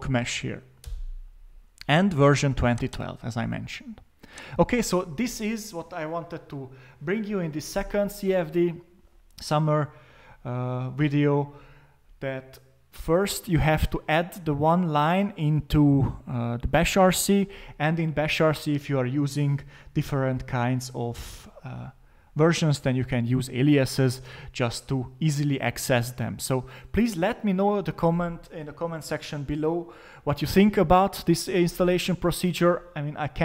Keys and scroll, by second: 0.8 Return.